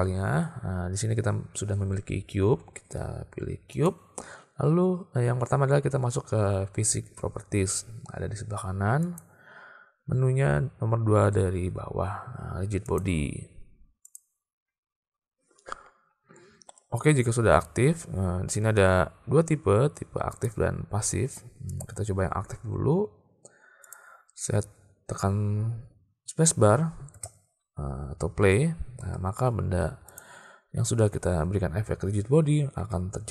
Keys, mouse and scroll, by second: 3.9 click, 9.1 click, 20.4-22.1 drag, 24.0 click, 27.2 space, 29.1 space, 30.1 click, 32.8 space.